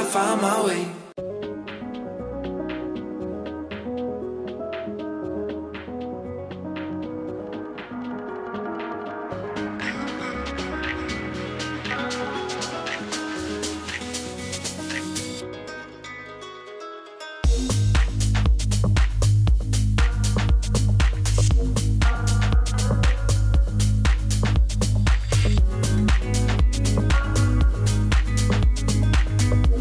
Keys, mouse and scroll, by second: 18.8-21.9 drag, 21.9 right click, 22.7 click, 25.2 Return, 25.8-29.8 typing, 28.0 click.